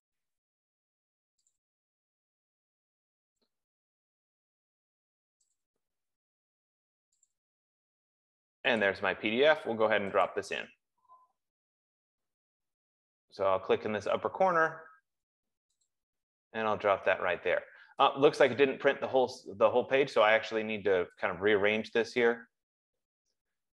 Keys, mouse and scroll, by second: 0.1 click, 0.5 click, 1.9 click, 2.4 click, 5.9 click, 6.3 click, 7.7 click, 8.2 click, 9.2 click, 10.8 click, 16.6 click, 18.9 click, 22.9 F15.